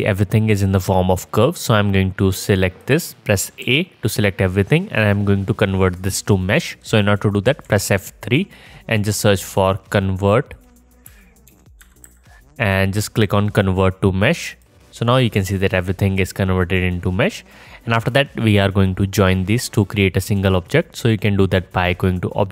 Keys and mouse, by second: 2.7 click, 3.7 a, 7.7 F3, 20.6-22.5 drag.